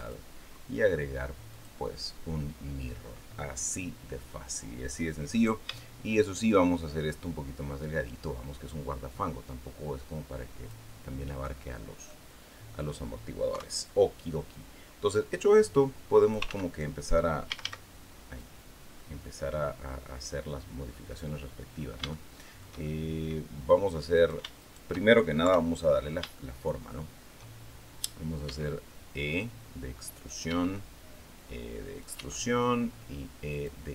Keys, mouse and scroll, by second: 1.3 click, 5.1 right click, 6.0 shift+right click, 7.0-10.7 drag, 11.2-11.6 scroll up 2, 11.9-12.9 drag, 13.3 KP_3, 15.2-16.3 drag, 16.3 ctrl+z, 17.3 a, 18.2-21.2 drag, 21.5-21.9 scroll up 3, 21.9 shift+middle click, 22.7 shift+middle click, 23.9 shift+right click, 24.4 shift+right click, 25.3 KP_3, 26.1-27.2 shift+middle drag, 28.3 e, 30.1 click, 30.3 e, 31.8 click, 31.9 e, 33.3 click.